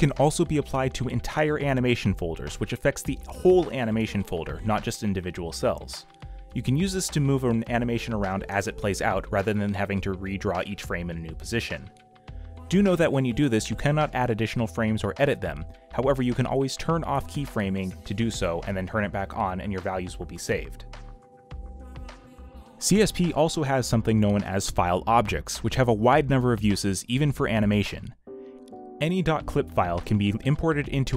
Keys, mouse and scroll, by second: 6.5 q, 19.5 b, 24.0 m, 25.6 x.